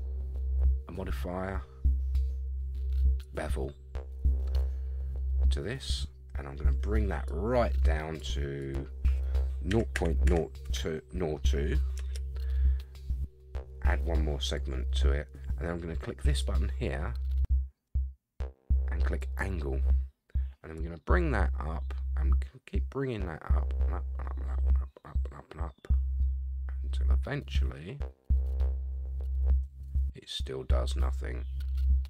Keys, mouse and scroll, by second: 4.2 scroll up 2, 4.6-5.8 middle drag, 7.3 click, 8.6-12.3 drag, 10.2 0, 14.4 click, 16.3-19.4 drag, 20.7-32.0 drag.